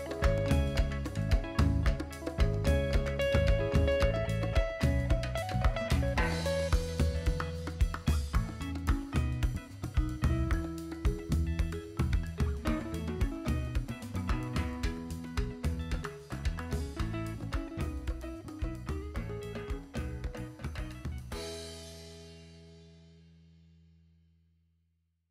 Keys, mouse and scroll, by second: 0.2 shift+click, 1.1-1.5 drag, 1.9 shift+click, 2.6-4.8 drag, 6.7 KP_1, 7.6 shift+middle drag, 7.9 shift+middle click, 8.5-9.7 drag, 9.9 click, 10.4 click, 11.0 click, 11.9-12.2 scroll up 2, 12.4 shift+middle click, 13.0 shift+click, 13.3-13.6 scroll up 3, 14.1-15.3 drag, 15.6 click, 16.7 click, 18.2 KP_1, 18.8 KP_7, 18.8 middle click, 20.2 click, 21.7 shift+click, 22.2-22.6 shift+middle drag, 23.3-24.3 drag.